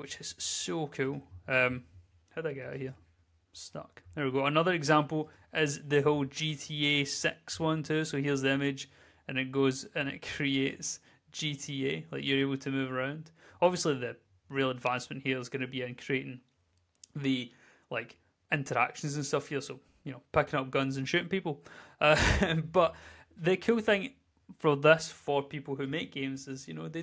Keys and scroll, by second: 0.4 w, 3.6-5.5 typing, 9.0 w, 18.3 d, 20.9 w, 23.1 w.